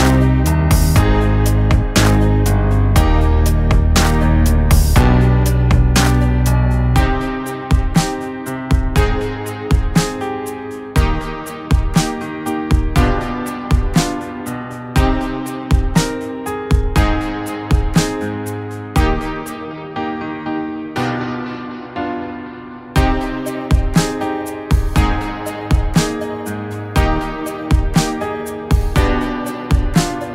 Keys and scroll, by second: 5.3 KP_1, 10.2 Tab, 14.3 ctrl+b, 21.0 Escape, 22.3 s, 26.5 s.